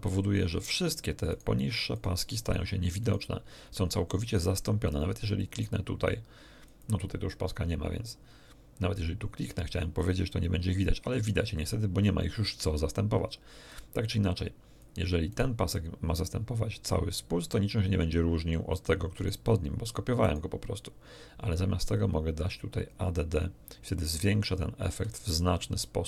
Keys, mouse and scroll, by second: 1.2 right click, 1.9 right click, 2.4 right click, 3.0 right click, 4.8 click, 5.4-10.2 drag, 11.4 click, 13.6-15.0 drag, 15.2 right click, 15.7-18.9 drag, 19.1 middle click, 20.2 middle click, 21.8 click, 22.8 click.